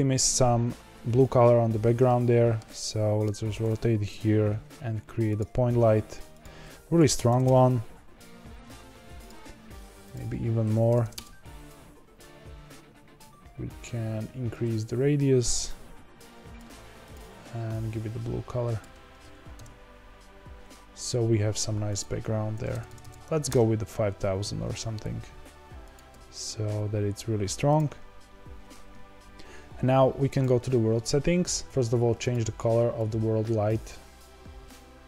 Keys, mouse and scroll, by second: 2.0-3.5 middle drag, 3.5 shift+right click, 5.3 shift+a, 7.4 KP_0, 8.4 g, 11.1 KP_0, 14.8-17.6 drag, 19.5 KP_0, 20.5-22.6 scroll down 3, 23.4 KP_0, 24.6 g, 26.1 g, 31.6 ctrl+z, 32.9 click.